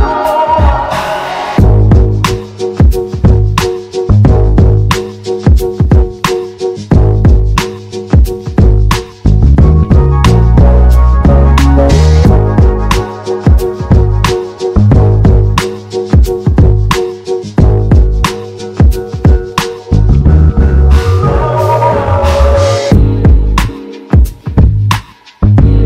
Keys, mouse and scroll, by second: 7.8 g, 10.4 g, 16.2 g, 20.3 g, 23.2 g.